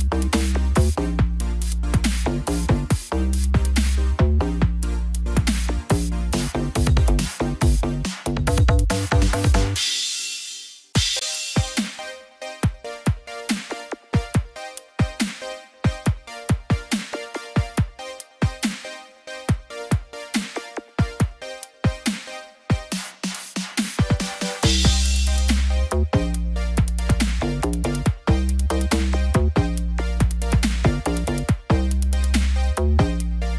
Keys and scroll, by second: 28.1 ctrl+0.